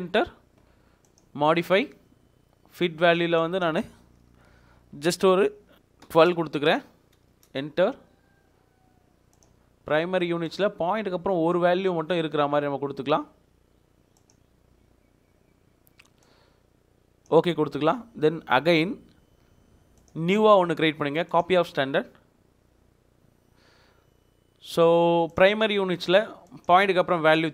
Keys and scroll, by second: 5.8-6.7 typing, 7.3 Return.